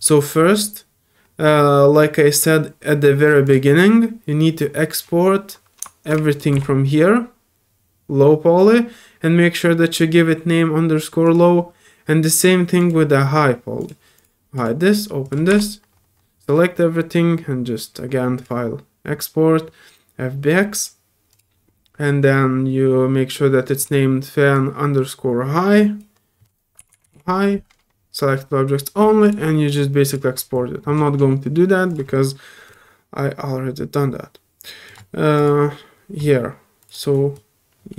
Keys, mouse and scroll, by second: 0.0 click, 3.4 click, 6.3 shift+click, 11.2 click, 12.8 click, 13.8 click, 14.2 click, 14.5 click, 15.2 click, 18.4 click, 21.3 click, 23.8 click, 24.5-26.0 drag, 29.2 click, 30.0 click, 31.9 click, 32.6 click, 35.3 click, 36.8 click, 37.3-37.9 drag.